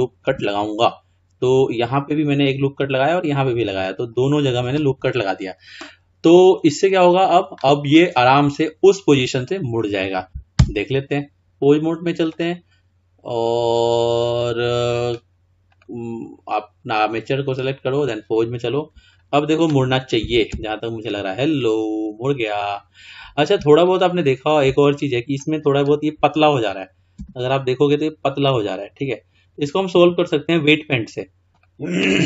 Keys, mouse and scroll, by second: 0.3 ctrl+r, 10.7 Tab, 12.3-15.1 drag, 15.7 click, 17.2-19.5 drag, 20.5 r, 24.0-24.8 middle drag, 24.8-25.2 scroll down 2, 25.2 scroll up 1, 25.4-27.2 middle drag, 27.2 r, 30.3-31.6 scroll down 3, 31.6 drag.